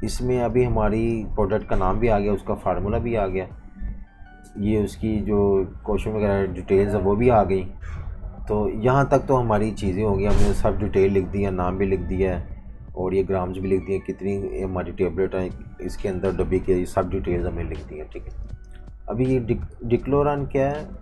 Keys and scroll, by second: 0.0-1.5 typing, 17.2 super+-, 17.4 super+-, 18.3 space, 19.7 typing.